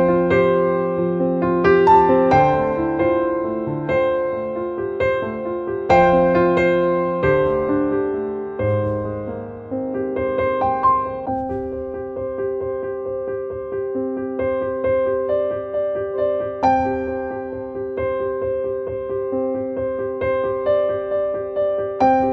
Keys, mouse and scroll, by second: 0.8 right click, 1.3-5.8 drag, 5.8-7.7 drag, 7.7 click, 8.6 scroll up 1, 9.4 click, 10.3-12.0 drag, 12.0-14.1 drag, 14.1-15.3 drag, 15.9 click, 16.8 click, 17.7-19.3 drag, 21.2-22.3 drag.